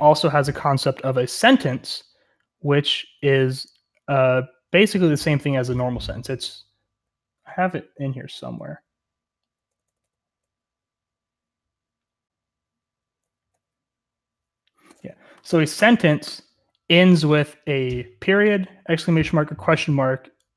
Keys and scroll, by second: 0.0-20.5 typing.